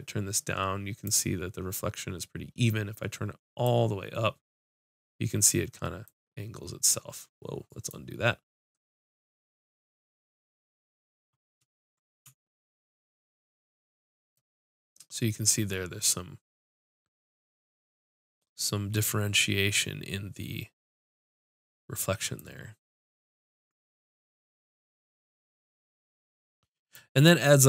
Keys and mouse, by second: 6.1 click, 22.5-23.6 drag.